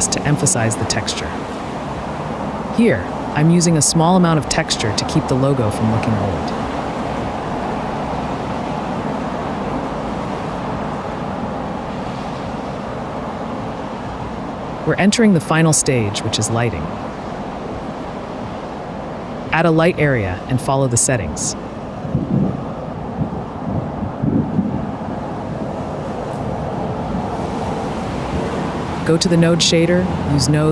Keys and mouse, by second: 2.0 g, 2.2 x, 3.1-3.7 drag, 4.5-5.8 drag, 8.4 click, 10.6 click, 12.5 space, 12.6 space, 15.0 space, 16.4-16.9 drag, 17.9 middle click, 19.6-21.6 drag, 22.4-23.1 drag, 23.4-25.7 drag, 23.8 0, 24.1 0, 26.9 click, 28.7-29.7 drag, 30.2-30.7 drag.